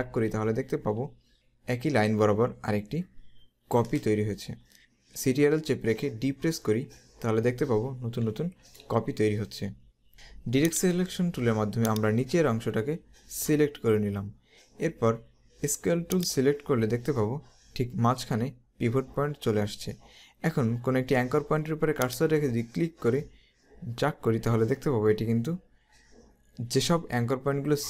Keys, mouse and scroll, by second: 6.2 ctrl+d, 6.7 typing, 8.1 ctrl+d, 10.8 click, 16.3 click, 22.1 click.